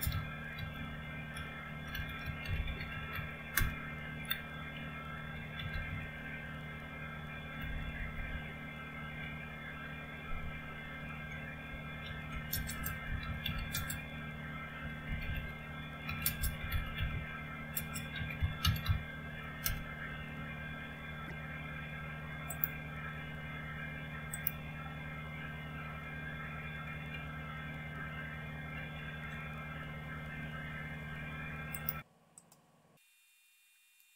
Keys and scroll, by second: 0.0-8.6 typing, 12.1-19.4 typing, 19.7 Return, 27.2 alt+Tab, 28.7 alt+Tab.